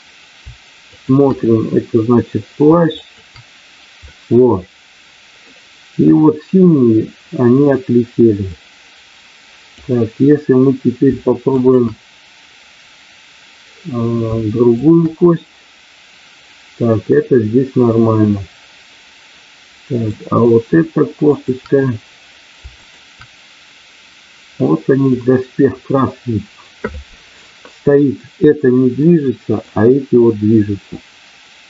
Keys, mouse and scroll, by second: 3.0 shift+click, 4.1-5.4 middle drag, 6.1 middle click, 8.5-9.8 drag, 11.5 shift+click, 14.9 shift+click, 18.2-20.0 middle drag, 21.1 shift+click, 22.7 shift+click, 24.7 middle click, 29.0 middle click.